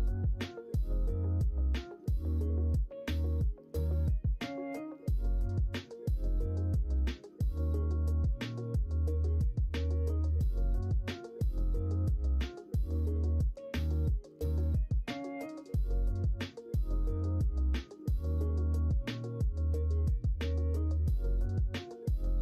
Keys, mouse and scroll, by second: 0.5 shift+middle click, 3.6 s, 7.0 3, 12.4 ctrl+i, 13.7 ctrl+z, 15.1 l, 15.8 h.